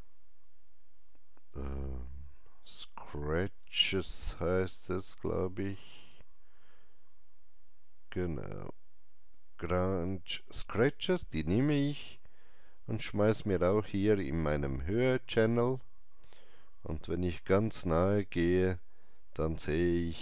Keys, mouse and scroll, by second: 3.5-3.9 typing, 11.1-11.8 typing, 11.3-19.0 drag, 16.8 alt+right click, 19.0-20.2 alt+drag.